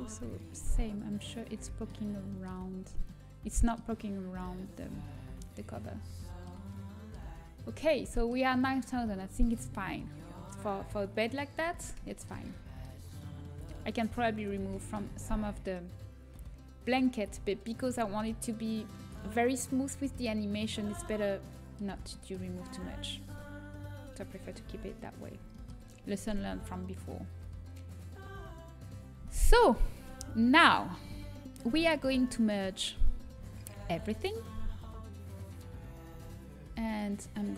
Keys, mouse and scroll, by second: 0.0 a, 0.0 Tab, 1.8 middle click, 4.9 Tab, 7.2 Tab, 12.8 Tab, 21.3-25.3 middle drag, 24.7 Tab, 25.4-27.9 middle drag, 32.3-34.7 right drag, 33.7 ctrl+j, 36.0 Tab, 36.6 a.